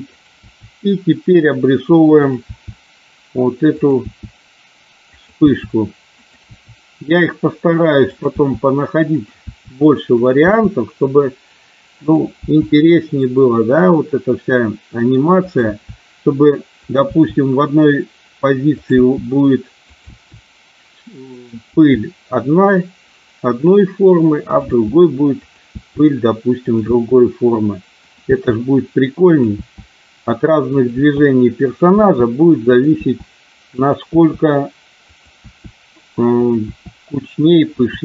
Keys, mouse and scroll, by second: 0.1 click, 0.3 e, 2.5 e, 3.6 click, 4.1 e, 5.1 click, 5.5 e, 6.2 click, 6.5 e, 8.0 click, 8.3 e, 9.3 e, 10.1 click, 10.3 e, 12.0 click, 12.3 e, 15.4 click, 15.6 e, 16.7 click, 17.0 e, 18.6 click, 19.0 e, 19.7 click, 20.1 e, 21.4 click, 21.7 e, 24.4 click, 24.7 e, 25.4 click, 25.6 e, 26.6 click, 26.7 e, 28.0 click, 28.3 e, 29.2 click, 29.6 e, 30.7 click, 30.9 e, 31.6 click, 32.0 e, 32.6 click, 33.0 e, 33.7 click, 34.1 e, 35.1 click, 35.3 e, 36.3 click, 36.6 e, 37.3 click, 37.7 e.